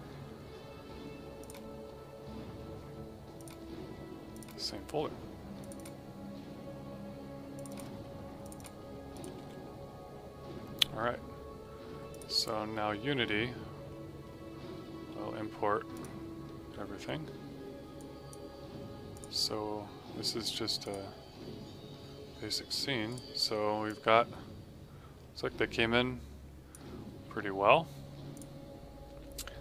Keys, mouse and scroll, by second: 1.3 click, 9.3 v, 12.0 click, 15.9 click, 23.1 right click, 23.8 click.